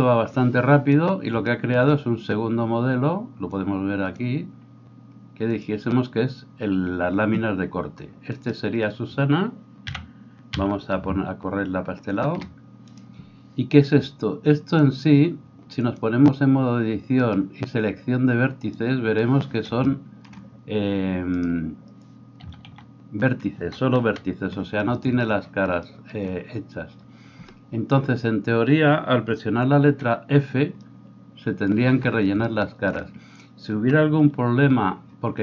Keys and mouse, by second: 5.6-8.3 middle drag, 8.3 right click, 8.5-12.9 middle drag, 9.9 g, 12.9-14.7 right drag, 14.7-35.4 drag, 21.3-22.4 middle drag, 21.3-22.4 right drag, 22.4 a, 22.7 a, 24.0 KP_1, 30.0 f.